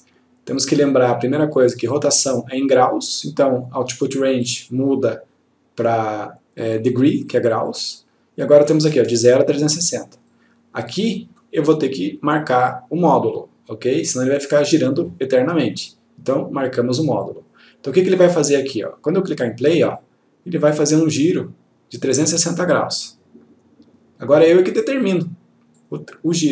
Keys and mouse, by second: 1.0-1.6 click, 4.6 click, 7.8 click, 10.4-11.7 click, 17.4 click, 20.1 click, 25.9 click.